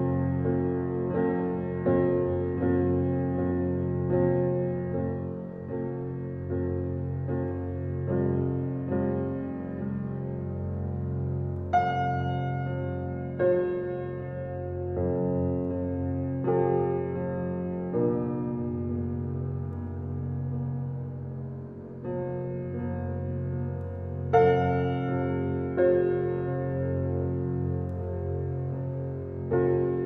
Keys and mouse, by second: 0.0 click, 1.1 click, 1.7-3.1 drag, 3.5 Escape, 6.5-8.1 drag, 8.2 Escape, 9.0 click, 9.9 click, 10.8 click, 12.4 click, 13.8 click, 15.0 click, 16.4 click, 17.7 click, 20.2 click, 21.5 ctrl+d, 22.2-23.2 shift+drag, 23.6-24.4 drag, 25.5-27.1 drag, 28.6-30.0 drag.